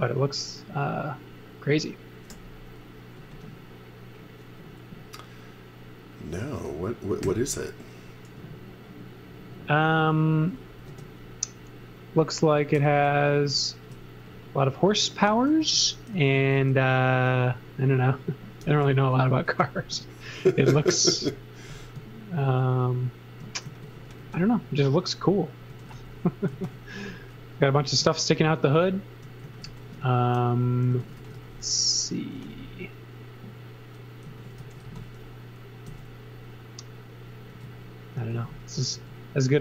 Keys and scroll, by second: 2.3 g, 7.2 n, 10.9 space, 12.7 n, 15.6 x, 16.1 z, 16.5 space, 18.6 n, 20.3 space, 22.4 shift+1, 23.6 z, 24.0 space, 25.4-27.1 typing, 29.2-32.4 typing, 34.0-35.9 typing, 37.5 space, 38.3 z, 38.9 space.